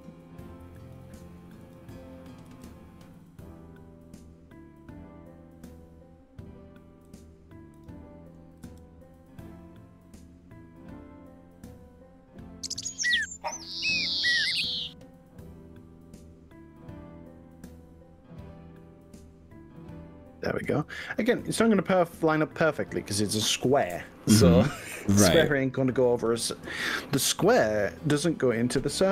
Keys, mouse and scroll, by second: 0.9 click, 1.7 click, 2.5 g, 7.1 click, 7.7 click, 8.7 g, 13.3 click, 14.1 g, 20.8 click, 21.4 click, 22.1 click.